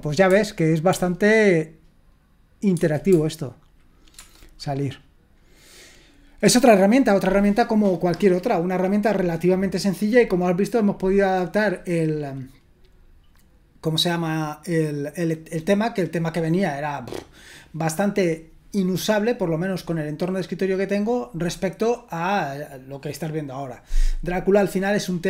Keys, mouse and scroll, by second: 0.3 Tab, 0.9 Tab, 2.7 Tab, 3.1 Tab, 4.1 Return.